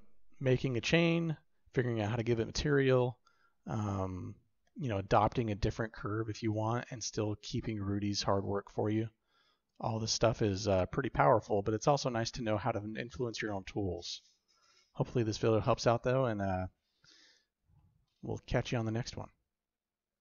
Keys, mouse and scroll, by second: 6.9-7.3 shift+drag, 7.3-9.6 shift+middle drag, 10.6 middle click, 12.2 click, 14.5 click, 17.1-17.5 shift+drag, 17.7 drag, 18.2-18.5 shift+drag, 18.8 click.